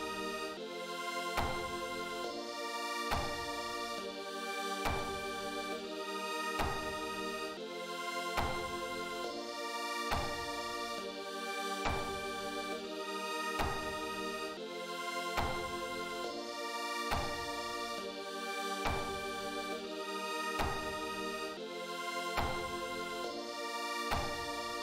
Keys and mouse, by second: 1.4 click, 2.0 click, 3.2 click, 9.9 click, 11.9 click, 13.2 click, 14.5 click, 17.3 click, 19.3 click, 19.9 click, 21.2 click, 23.2 click.